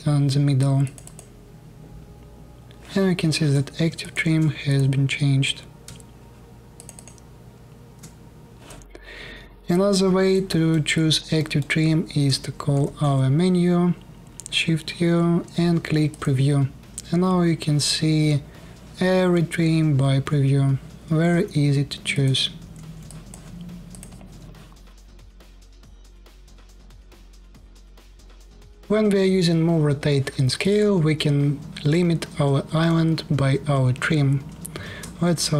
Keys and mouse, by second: 1.0-3.7 ctrl+shift+middle drag, 3.9 ctrl+shift+middle click, 4.5-6.4 middle drag, 6.4 ctrl+shift+click, 6.7-9.4 ctrl+shift+middle drag, 9.4-10.2 drag, 9.4-10.2 middle drag, 9.4-10.2 right drag, 10.2 click, 10.2 middle click, 10.2 right click, 10.4 click, 10.4 middle click, 10.4 right click, 12.4 shift+u, 18.5-23.7 drag, 24.1 alt+click, 24.4 alt+middle click, 24.6-26.1 alt+drag, 26.1-27.5 shift+middle drag, 30.4-34.2 drag, 34.5 shift+f.